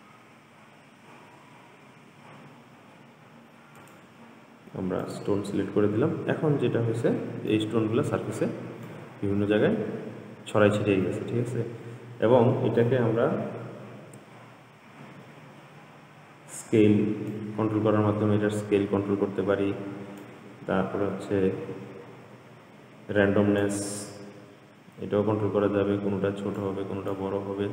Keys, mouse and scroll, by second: 2.5-4.0 scroll down 1, 4.0-7.0 drag, 7.8-9.4 middle drag, 9.4-11.1 scroll up 1, 11.1-11.9 scroll up 1, 11.9-12.5 scroll down 1, 12.5-15.0 scroll down 1, 17.6-20.6 drag, 23.9-26.9 drag, 27.3-27.7 drag.